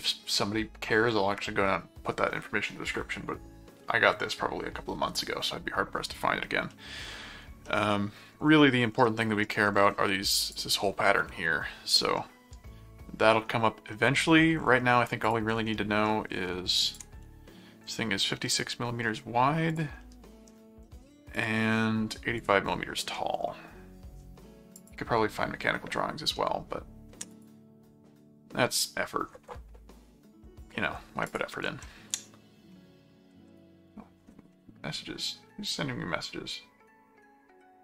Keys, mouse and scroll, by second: 6.7 middle click, 7.6 middle click, 9.0 middle click, 10.4 click, 12.2-13.3 middle drag, 13.9 middle click, 15.2 click, 15.6 middle click, 16.8 ctrl+click, 18.7 middle click, 19.7 click, 20.0 middle click, 21.4 ctrl+click, 22.4 click, 22.9 middle click, 24.7 click, 26.4 middle click, 27.3 click, 31.2 ctrl+click, 31.6 ctrl+Tab, 33.3 ctrl+shift+Tab.